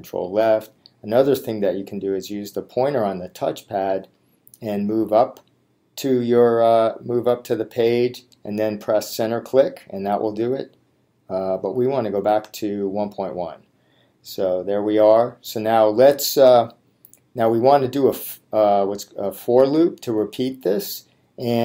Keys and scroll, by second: 0.4 Left, 9.3 Return.